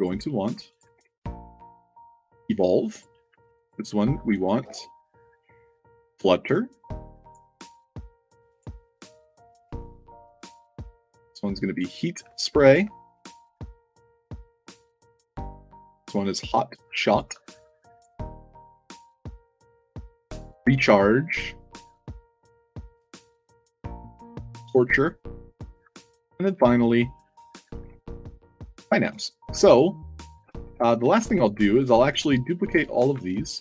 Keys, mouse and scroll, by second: 0.6 click, 0.9 ctrl+v, 1.9 click, 2.8 drag, 3.6 click, 4.2 click, 4.5 ctrl+v, 5.7 click, 8.4 click, 9.6 click, 9.9 click, 10.2 ctrl+v, 11.7 click, 12.3-12.6 alt+drag, 13.1 click, 13.8 click, 14.7 click, 14.9 ctrl+v, 16.9 click, 17.8 click, 18.5 click, 18.8 click, 19.1 ctrl+v, 20.0 click, 21.2 click, 22.1 click, 22.6 click, 22.9 click, 23.2 ctrl+v, 24.3 click, 25.1 click, 25.8 click, 27.4 click, 27.7 ctrl+v, 28.4 click, 28.9 d, 29.6-30.1 alt+drag, 30.3 space, 30.4 d, 30.7 alt+drag, 31.1 middle click, 31.1 space, 31.6-32.0 drag, 32.7 click, 33.0 w, 33.1 space.